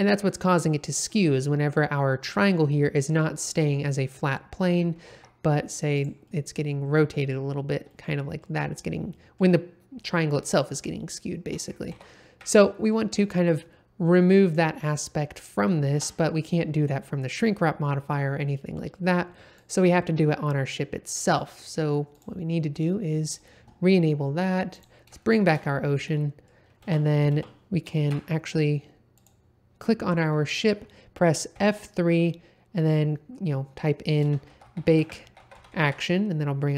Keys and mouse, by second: 0.4 middle click, 2.8 middle click, 4.1 middle click, 4.9 g, 5.1 z, 5.9 click, 6.2-7.3 middle drag, 7.9 middle click, 9.1 middle click, 11.9 ctrl+z, 12.5 middle click, 15.9 Tab, 19.6 click, 22.1 click, 23.2 click, 24.7 click, 25.2 shift+middle drag, 26.1 middle drag, 26.8 space, 27.6 space, 28.0 shift+Left, 29.1 click, 31.6 F3.